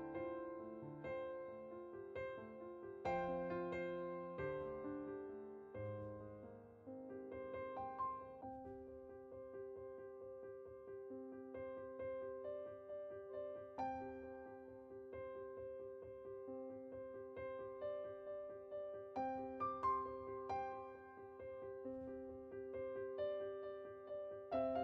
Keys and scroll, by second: 0.0 1.